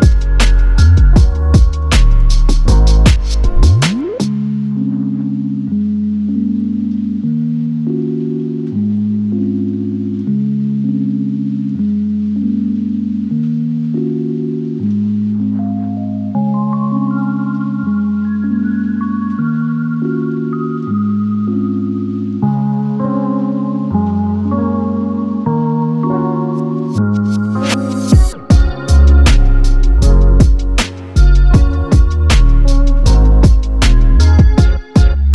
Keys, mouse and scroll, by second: 3.5 click, 13.2 space, 18.9 click, 23.2 d, 25.5 click, 28.4 5, 29.9 click.